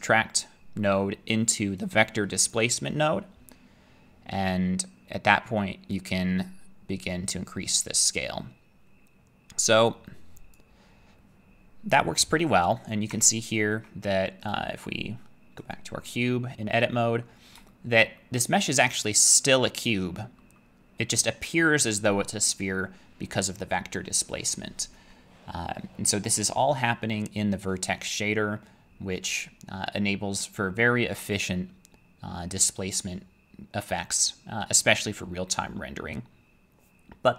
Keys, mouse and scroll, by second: 1.3 middle click, 2.5 click, 10.6 click, 13.1 Tab, 14.5 click, 15.7 click, 17.2 middle click, 18.0 shift+middle click, 20.4 middle click.